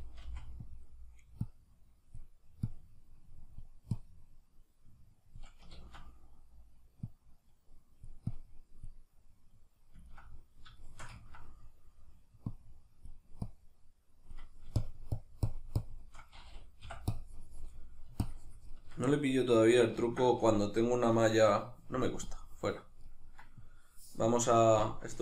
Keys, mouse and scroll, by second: 0.2 f, 5.8 ctrl+z, 5.8-9.1 drag, 9.1-12.5 middle drag, 12.5-19.1 drag, 19.1-22.3 middle drag, 22.3 click, 23.1-24.9 middle drag, 24.9-25.2 drag.